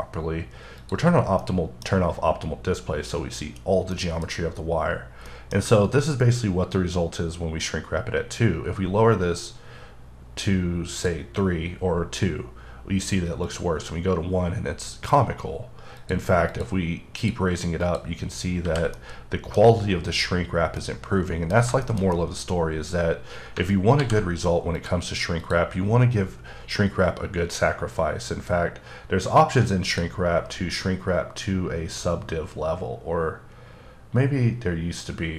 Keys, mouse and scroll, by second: 0.8 click, 1.4 middle click, 3.9 middle click, 4.3-4.9 scroll up 3, 4.9-5.3 scroll down 2, 5.3 middle click, 11.9 click, 13.5 click, 16.0 click, 16.5 click, 17.2 click, 17.8 click, 18.6 h, 19.0 middle click, 20.8 middle click, 21.8 shift+middle click, 22.3 scroll down 1, 24.0 alt+h, 24.7 click, 25.4 click, 29.9 click.